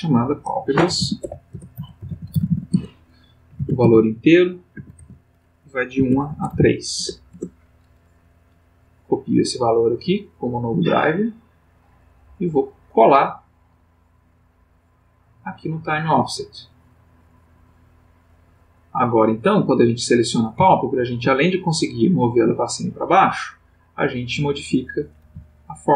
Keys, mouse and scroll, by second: 0.0 click, 0.9-2.5 typing, 2.7 shift+Tab, 3.5 1, 3.8 Tab, 4.7 1, 5.0 Tab, 6.0 1, 6.2 Tab, 6.5 3, 7.0 Return, 11.3 click, 13.0 click, 14.5 click, 15.9 right click, 17.4 click, 19.8 click, 20.5 g, 22.8 click, 23.7 click, 25.2 g.